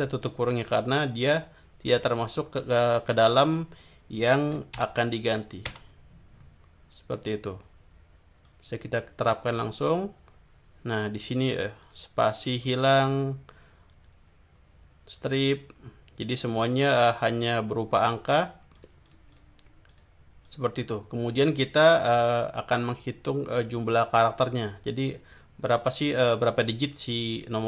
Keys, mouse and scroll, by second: 0.6 click, 2.8 click, 4.8 shift+0, 5.6 Return, 7.2 click, 8.4-9.8 drag, 11.8 click, 17.0 click, 18.8-19.6 drag, 19.9 click, 20.4 click, 23.8 click, 25.8 scroll down 1, 26.8 scroll down 1.